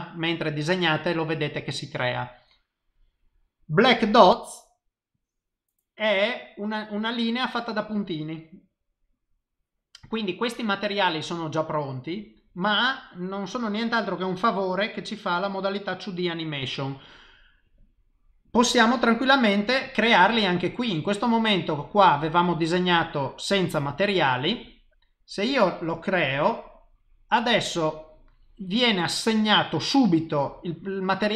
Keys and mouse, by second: 25.9 click.